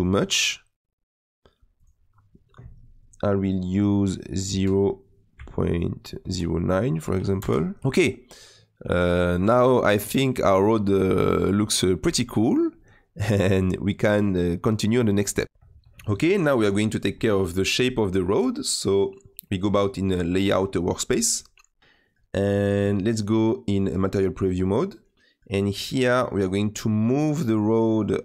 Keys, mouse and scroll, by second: 7.8 middle click, 8.3 scroll down 1, 8.4-12.3 middle drag, 12.3-12.7 scroll down 2, 12.7-16.6 middle drag, 16.6 click, 21.2 click, 21.8-24.3 middle drag, 24.3 click, 25.1-28.2 middle drag.